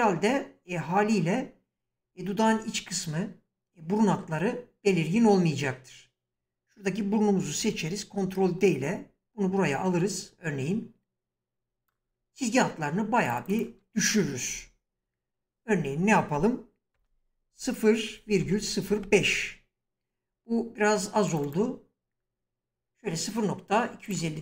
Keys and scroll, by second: 6.3 s, 7.6 ctrl+d, 17.0-19.3 typing.